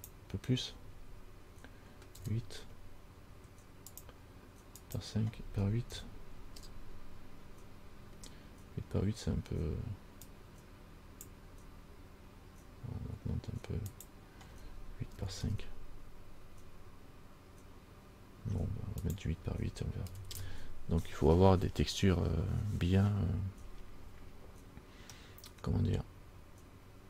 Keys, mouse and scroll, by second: 0.1 click, 5.2 click, 10.5 click, 14.1 click, 19.2 click, 25.4 middle click.